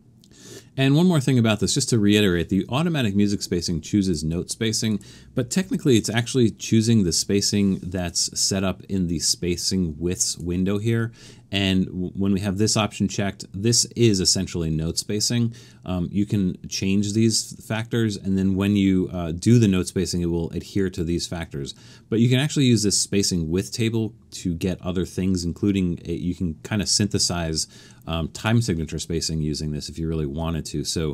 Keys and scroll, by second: 5.6 alt+super+a.